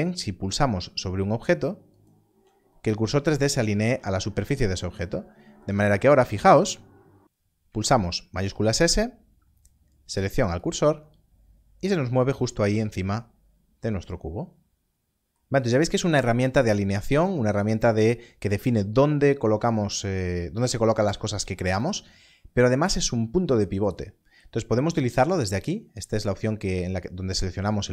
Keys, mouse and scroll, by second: 1.9 shift+right click, 8.3 shift+s, 10.5 shift+s, 10.6 click, 20.2 click, 21.3 g, 24.9 g, 24.9 click.